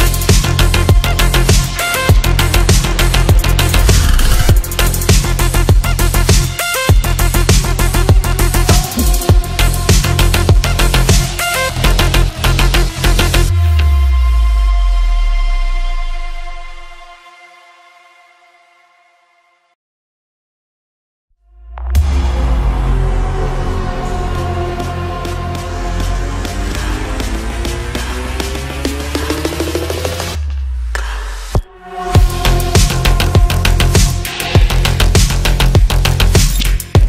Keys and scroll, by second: 0.7 Escape, 0.9 F3, 1.3 Escape.